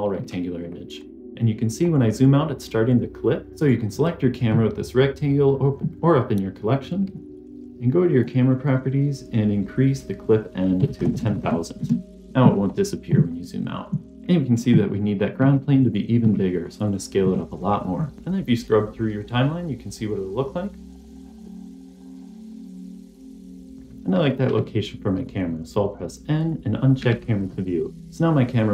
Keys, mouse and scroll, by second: 0.5 scroll up 1, 0.9-1.8 scroll down 2, 1.8-2.2 scroll up 1, 2.2-2.6 scroll down 2, 2.6-3.4 scroll up 1, 3.4 scroll down 1, 3.5 click, 8.0 click, 10.1-11.7 drag, 11.0 KP_0, 11.2 KP_0, 12.5 scroll up 1, 13.2 scroll up 1, 14.1 s, 15.3 s, 16.1 s, 17.1 s, 17.8 scroll down 3, 18.0 scroll up 1, 18.0 scroll down 1, 19.2-21.2 drag, 21.7-22.1 drag, 23.0 click, 24.4 n, 26.3 click, 26.9 n, 27.5-28.0 scroll down 3, 28.0 scroll up 2, 28.1-28.7 scroll down 1.